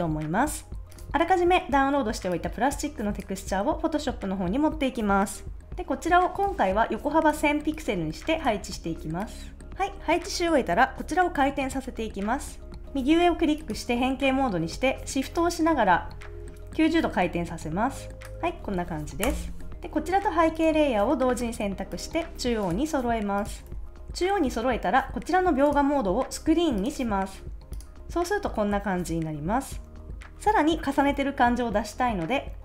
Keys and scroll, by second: 0.9 a, 19.3 Return, 23.7 super+s.